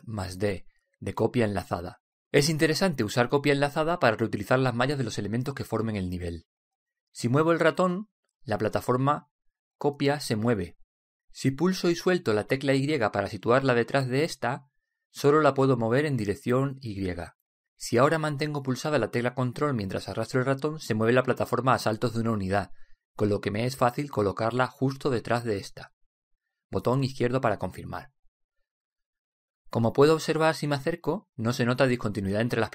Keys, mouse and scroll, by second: 1.4 alt+d, 31.5-32.7 middle drag.